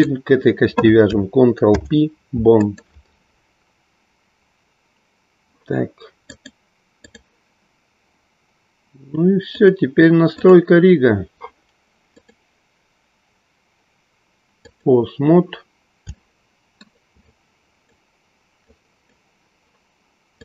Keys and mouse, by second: 2.7 ctrl+p, 6.2-7.2 drag, 10.5 click, 12.1-14.8 drag, 16.2-17.3 shift+middle drag, 17.3-18.1 drag, 18.7-19.2 drag.